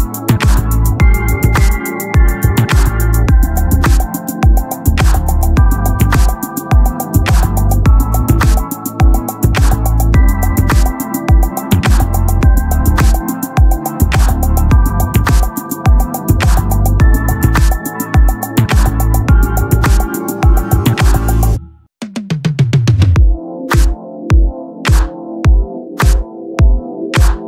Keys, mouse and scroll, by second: 0.7-2.5 drag, 1.6 s, 4.0 shift+a, 4.6 KP_1, 5.6-6.8 drag, 6.9 shift+a, 7.8 shift+s, 9.3-10.6 drag, 10.6 s, 11.1-13.3 drag, 11.9 s, 13.3 right click, 14.2 KP_1, 14.3-16.0 drag, 14.7 middle click, 14.7 right click, 15.3 shift+d, 16.4 right click, 16.6-18.7 drag, 17.2 middle click, 17.2 right click, 17.9 shift+d, 19.4-22.1 drag, 22.7-24.8 drag, 25.4 click, 25.4-27.4 right drag.